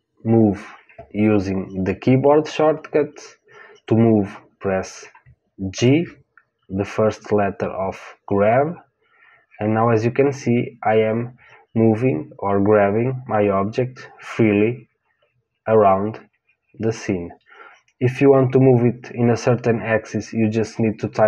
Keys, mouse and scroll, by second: 5.7 g.